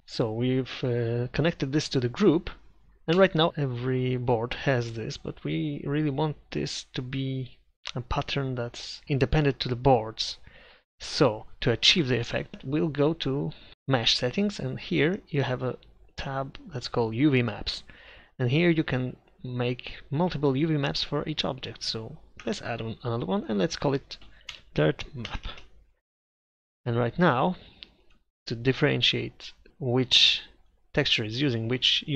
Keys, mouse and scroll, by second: 3.5 Tab, 12.5 Tab, 29.7 Tab.